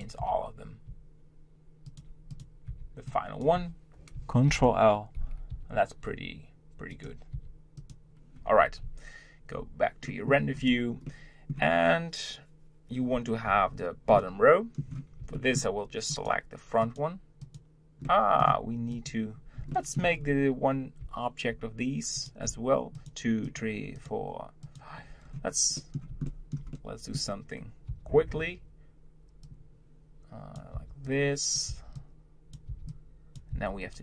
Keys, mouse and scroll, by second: 2.3 click, 2.7 b, 4.5 ctrl+l, 5.5 g, 7.3 s, 8.5 Tab, 8.8 z, 10.1-10.6 middle drag, 10.6 click, 11.1-14.1 middle drag, 14.1-16.1 middle drag, 16.1 click, 16.8 click, 18.0-18.9 middle drag, 18.9 click, 19.7-20.2 shift+middle drag, 20.2-20.5 scroll up 2, 21.0 z, 22.2 click, 22.9 shift+click, 23.4 shift+click, 23.9 shift+click, 24.6 shift+click, 25.2-25.7 scroll down 2, 25.7-27.9 middle drag, 27.9 b, 30.7 b.